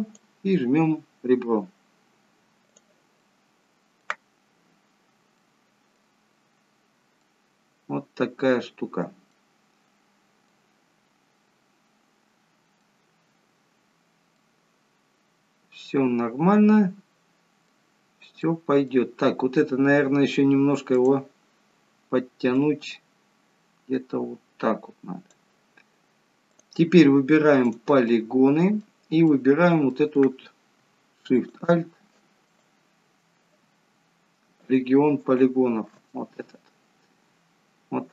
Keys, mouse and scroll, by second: 3.3 middle click, 6.5-7.3 scroll up 1, 7.3 middle click, 7.3-7.6 scroll up 1, 11.4 middle click, 13.3-13.6 scroll down 1, 14.4 middle click, 18.5 middle click, 21.0 click, 25.4 click, 26.6 click, 27.7 click, 28.1 middle click, 29.4 middle click, 31.4 alt+shift+click, 32.5 click, 34.7 alt+shift+click, 36.2 middle click.